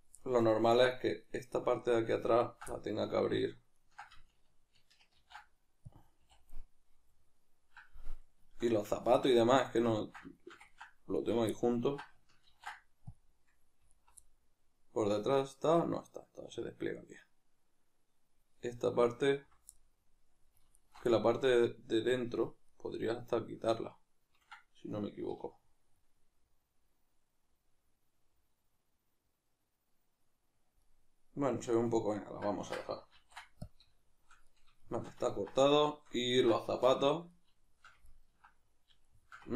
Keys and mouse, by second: 0.0 right click, 0.2-1.2 middle drag, 1.2 right click, 1.6-2.4 middle drag, 2.4 ctrl+right click, 2.7-3.8 middle drag, 3.8 ctrl+right drag, 7.2-11.2 middle drag, 11.2 alt+right click, 11.6-13.9 ctrl+middle drag, 12.5 ctrl+e, 13.9 alt+right click, 14.2-19.0 middle drag, 19.0 alt+right click, 19.8-20.8 middle drag, 20.8-21.1 alt+shift+right drag, 21.1-39.5 middle drag, 25.3 \, 33.2 ctrl+e, 36.9 \.